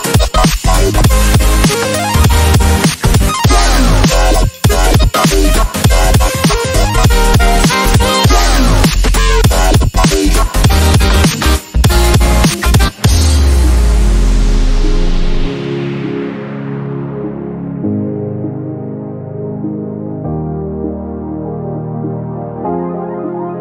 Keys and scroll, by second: 17.5 ctrl+v.